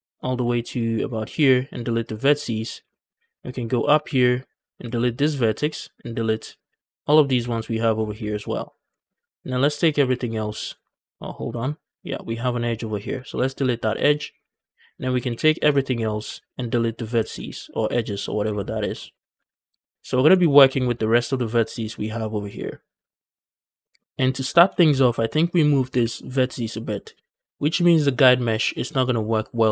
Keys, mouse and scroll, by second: 0.0 shift+scroll up 1, 0.5 shift+click, 1.1 x, 2.5 scroll down 2, 2.7 shift+middle click, 3.0 scroll up 1, 3.3 shift+middle click, 3.6 scroll up 1, 3.6 a, 3.8 a, 4.5 click, 4.7 x, 5.5 alt+click, 6.4 click, 7.1 x, 7.8 scroll down 2, 8.1 shift+middle click, 8.3 scroll up 1, 8.4 a, 8.6 a, 8.8 shift+middle click, 9.8 l, 10.1 scroll down 3, 10.4 scroll up 2, 10.7 shift+middle click, 11.0 scroll up 1, 11.3 shift+middle click, 11.5 scroll up 1, 12.0 click, 12.7 shift+click, 13.2 x, 14.1 scroll down 3, 14.3 a, 14.4 a, 15.1 l, 15.4 scroll down 2, 15.7 shift+middle click, 15.9 scroll up 1, 16.1 x, 17.2 ctrl+z, 17.3 x, 17.9 click, 18.3 Tab, 18.4-19.2 scroll up 4, 18.8 shift+middle drag, 19.2 Tab, 19.5 a, 19.7 a, 19.9 scroll down 4, 19.9 shift+middle click, 20.0 scroll up 1, 20.1 Tab, 20.3-22.4 scroll down 4, 20.6 shift+middle click, 22.4-22.9 scroll up 3, 23.0 shift+middle click, 23.2 scroll up 2, 23.7 shift+middle click, 23.9-24.2 scroll up 2, 24.2 Tab, 24.6 shift+middle click, 24.7 scroll up 2, 24.9 Tab, 25.3 click, 25.8 g, 26.8 right click, 27.1 Tab.